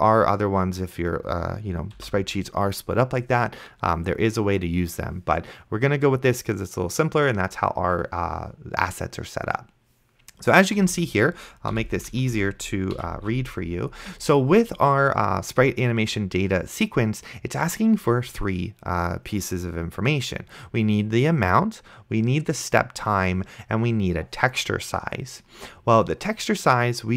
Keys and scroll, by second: 2.3 ;, 11.1 Left, 11.8 ,, 12.1 Left, 13.0 ,, 13.5 ctrl+s.